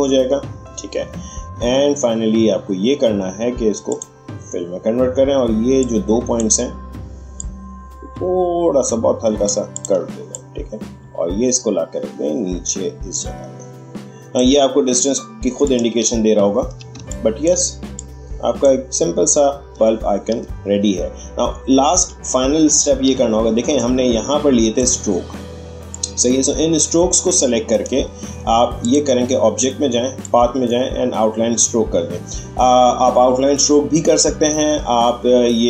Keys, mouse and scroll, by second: 1.4 click, 3.9-15.6 drag, 16.1-16.7 alt+scroll down 1, 16.9 space, 17.1 click, 17.4 space, 17.9 click, 17.9-19.9 drag, 19.9-20.3 alt+scroll up 1, 21.9-22.8 scroll up 2, 22.8 alt+scroll up 1, 23.7-35.6 drag.